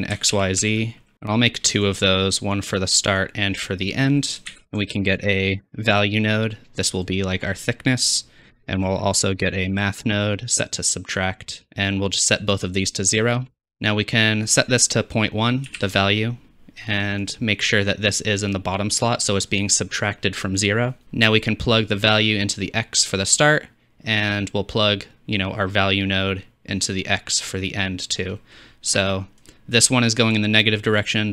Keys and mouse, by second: 1.1 shift+click, 1.3 shift+d, 2.7-4.4 drag, 4.5 shift+a, 8.6 shift+a, 9.5 click.